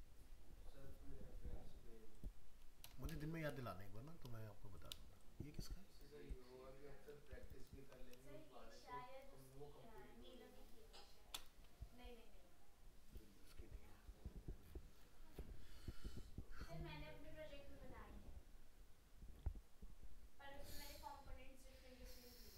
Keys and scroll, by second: 2.8 ctrl++, 7.3 ctrl+space.